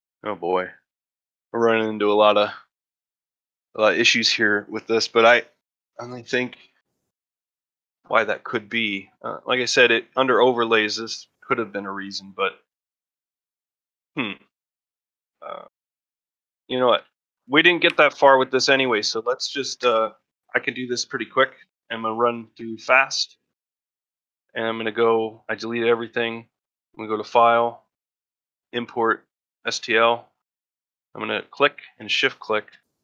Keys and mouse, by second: 16.1 ctrl+middle drag, 16.5 ctrl+middle click, 16.9 shift+middle drag, 17.9 drag, 18.3 shift+click, 19.7 x, 20.9-21.2 middle drag, 21.4 middle drag, 21.9 middle click, 24.9 click.